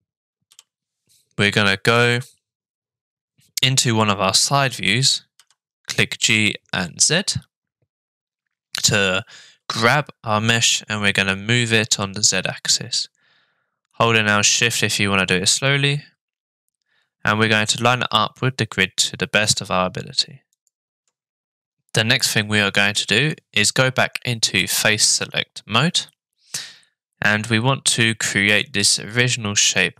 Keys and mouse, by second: 5.4 g, 24.6 click, 25.2-27.5 middle drag, 28.1 middle click.